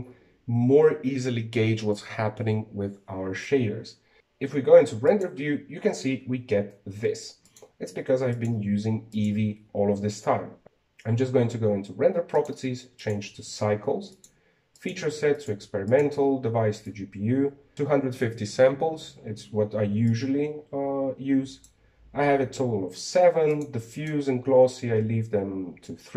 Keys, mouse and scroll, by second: 0.0-3.3 shift+middle drag, 6.3 click, 8.5 click, 9.4 click, 10.2 click, 13.5-19.1 drag, 21.2-24.2 drag, 24.6-25.7 drag.